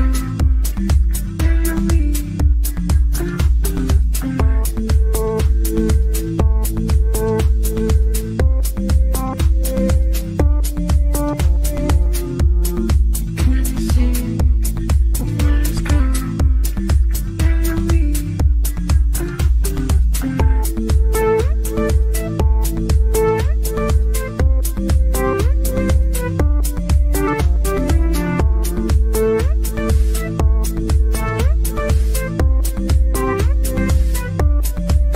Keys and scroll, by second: 14.3 shift+F2, 14.8 Escape, 24.5 ctrl+z, 26.7 w, 30.8 f, 34.8 g.